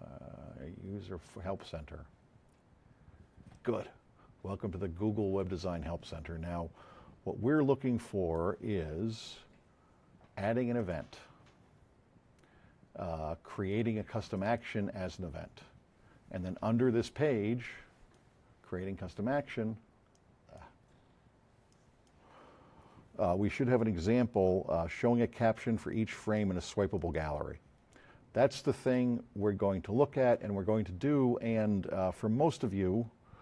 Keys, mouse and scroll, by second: 4.6 click, 7.5-8.4 drag, 10.7 click, 10.8 KP_1, 14.3 click, 17.6-18.0 drag, 20.1 click, 22.4 scroll up 2, 26.9 click, 28.2 F7, 28.9-29.9 drag.